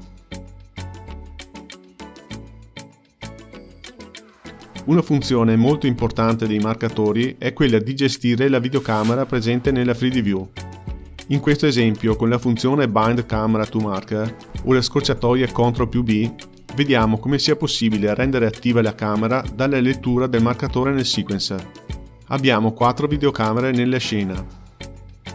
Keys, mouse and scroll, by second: 4.5 click, 9.5 space, 16.2 space, 18.3-20.1 drag, 21.6 click, 23.1 click, 24.8 click.